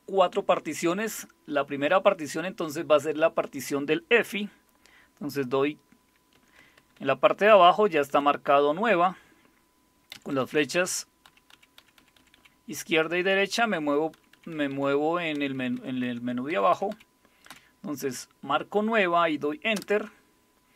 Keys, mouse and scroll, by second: 6.3 Right, 6.6 Right, 6.7 Right, 6.9 Right, 7.4 Left, 7.6 Left, 7.8 Left, 7.9 Left, 8.1 Left, 8.9 Right, 10.1 Right, 10.3 Right, 10.5 Right, 11.3 Left, 11.5 Left, 11.8 Left, 12.0 Left, 12.2 Left, 12.8 Right, 13.0 Right, 13.2 Right, 13.4 Right, 13.6 Right, 14.2 Left, 14.3 Left, 14.5 Left, 14.7 Left, 15.3 Right, 15.3 typing, 15.6 Right, 15.7 Right, 16.0 Right, 16.5 Left, 16.7 Left, 16.9 Left, 17.5 Left, 19.7 Return.